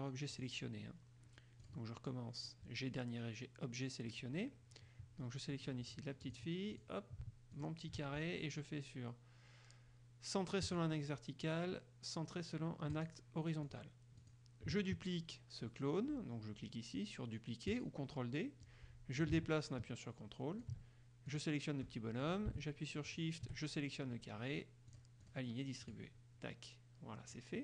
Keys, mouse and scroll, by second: 0.5 click, 1.8 click, 5.7 click, 6.4 click, 6.9 click, 7.7 shift+click, 10.8 click, 13.1 click, 13.8 click, 14.3 click, 17.9 click, 18.8-21.0 drag, 21.5 click, 23.2 shift+click, 25.1 click, 26.1 click.